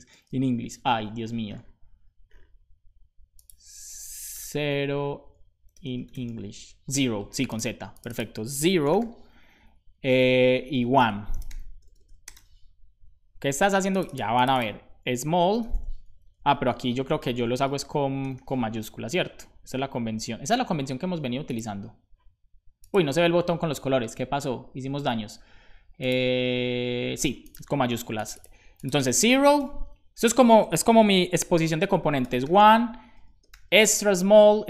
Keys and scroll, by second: 8.5-9.3 typing, 9.5 Down, 9.8 Right, 10.0 Right, 10.1 Right, 10.3 Right, 11.0-11.9 typing, 15.0-17.7 typing, 29.7 BackSpace, 29.9 shift+`, 31.4 shift+z, 31.7 Down, 32.4 shift+o, 33.5 shift+e, 34.1 Down, 34.5 Down.